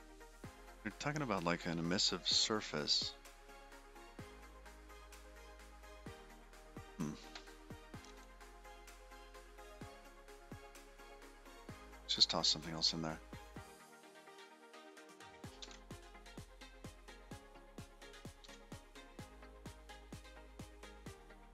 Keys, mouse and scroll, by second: 9.8 click, 10.5 middle click, 11.3 middle click, 13.2 click, 14.7 click, 16.1 shift+a, 18.9 shift+a.